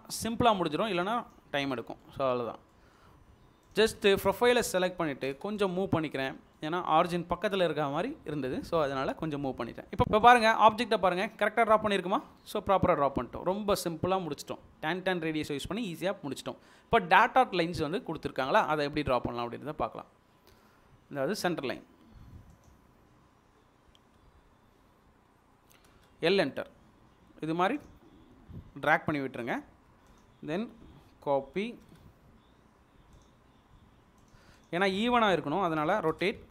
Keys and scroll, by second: 1.9 Delete, 5.2 m, 6.4 Escape, 25.7 typing, 27.2 space, 29.6 Escape, 31.2-31.9 typing, 36.0 typing.